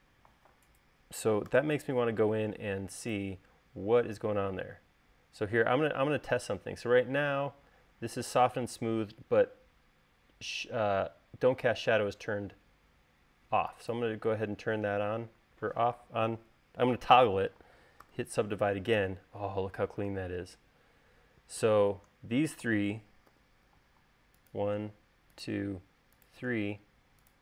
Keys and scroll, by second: 1.8 u, 18.3 u, 23.6 u.